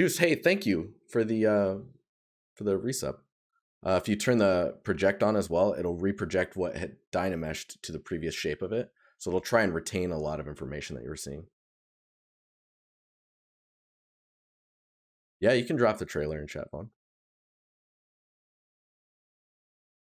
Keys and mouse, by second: 16.0 right click.